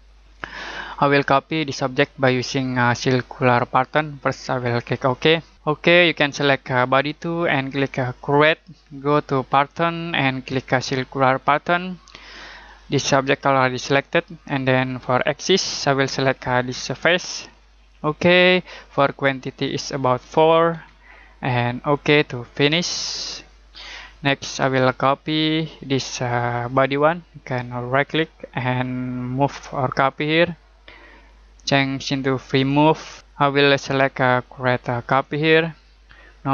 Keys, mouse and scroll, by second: 0.5 middle click, 7.0 click, 11.4 click, 15.2 click, 19.6 click, 20.7 4, 21.9 click, 23.5 middle click, 26.7 click, 27.9 right click, 29.9 click.